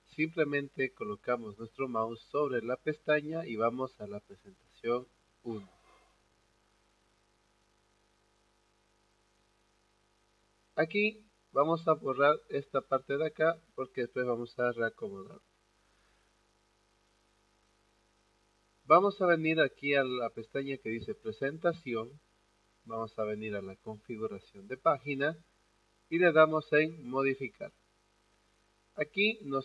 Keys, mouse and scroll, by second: 5.2 click, 11.5 click, 20.6 click, 23.5 click, 26.6 click.